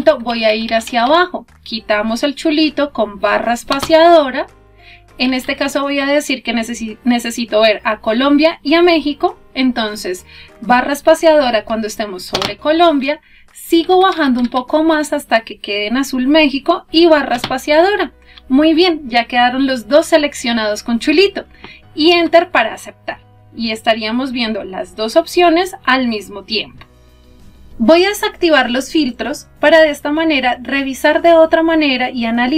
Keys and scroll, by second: 3.3 space, 10.7 space, 17.1 space, 21.9 Return.